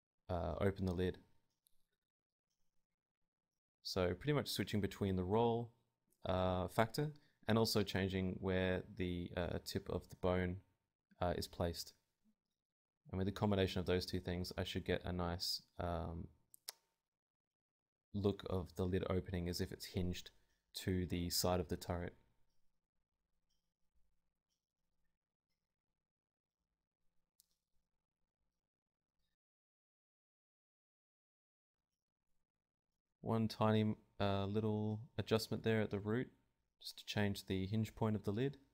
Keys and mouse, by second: 0.5 Tab, 1.1 click, 2.0 middle click, 2.9 click, 3.6 Tab, 4.2 Tab, 4.8 r, 5.2 middle click, 5.4 Tab, 5.4 click, 6.1 middle click, 6.2 r, 6.8-7.9 drag, 6.8-7.9 right drag, 7.9 ctrl+z, 8.0 ctrl+z, 9.0 ctrl+z, 9.2 ctrl+z, 9.4 ctrl+z, 9.6 ctrl+z, 10.9 click, 11.4 Tab, 13.7-15.0 drag, 15.0 right click, 15.1 g, 18.0 click, 18.5 g, 19.5 KP_7, 20.0 g, 23.2-24.2 drag, 24.3 Tab, 25.2 click, 25.9 ctrl+z, 25.9 ctrl+Tab, 26.2 right click, 27.0 right click, 27.2 click, 27.8 Tab, 29.2 right click, 29.5 g, 29.7 Tab, 30.0 Tab, 30.2 g, 30.5 Tab, 30.8 Tab, 30.9 g, 31.5 Tab, 31.5 click, 32.7 Tab, 33.5-34.6 middle drag, 34.2 KP_7, 34.6 g, 35.0 click, 35.5 Tab, 35.7 Tab, 35.8 Tab, 36.2 Tab, 36.7 KP_7, 36.9 g, 37.5 Tab, 38.2 click.